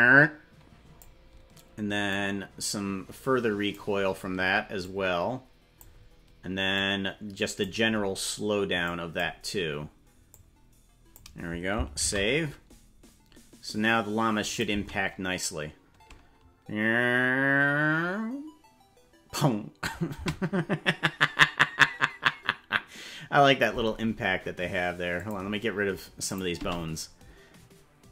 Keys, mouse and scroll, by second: 2.1-3.7 drag, 4.8-5.8 drag, 6.7 click, 8.8 click, 10.3 click, 13.9 ctrl+s, 14.4 click, 14.7 space, 20.1 space, 25.1 click, 26.2 click, 26.5 space.